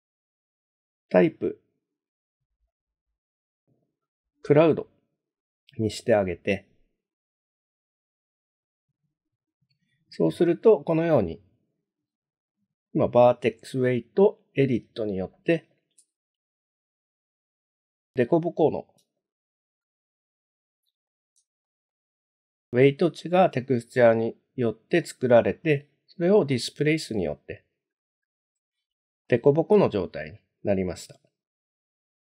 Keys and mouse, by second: 2.7-4.7 drag, 8.1 click, 11.0-12.0 middle drag, 15.4 middle click, 16.1 shift+middle click, 18.3 middle click, 19.2 shift+middle click, 19.8-21.1 middle drag, 21.6 shift+middle click, 25.0 middle click, 29.2-30.3 middle drag.